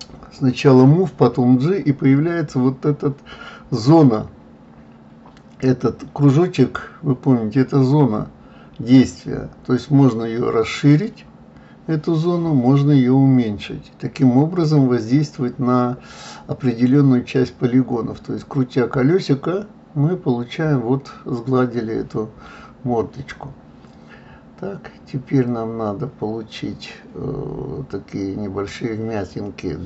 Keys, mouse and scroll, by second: 3.2-6.2 middle drag, 6.7 click, 7.5-9.2 middle drag, 9.2 KP_3, 15.3 g, 19.2-22.2 middle drag, 22.2 click, 22.7-24.6 middle drag, 24.6 shift+click, 25.2-28.2 middle drag.